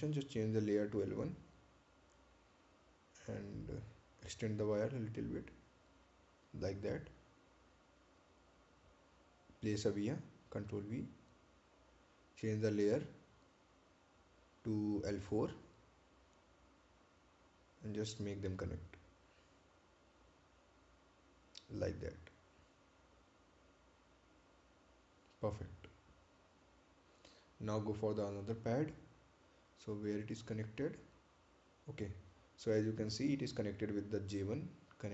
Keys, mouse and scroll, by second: 1.9 click, 8.3 click, 8.9 right click, 10.8 ctrl+v, 11.5 click, 12.3 right click, 16.8 click, 26.4 click, 28.1 right click, 29.2 ctrl+click, 30.7-31.2 scroll down 1.